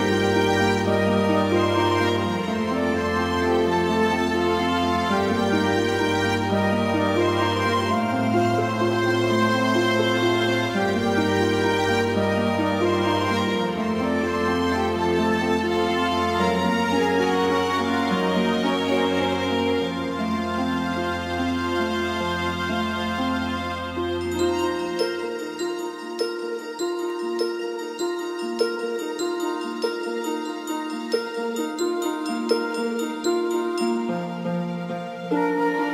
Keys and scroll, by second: 1.6 ctrl+d, 11.7 x, 13.4 x.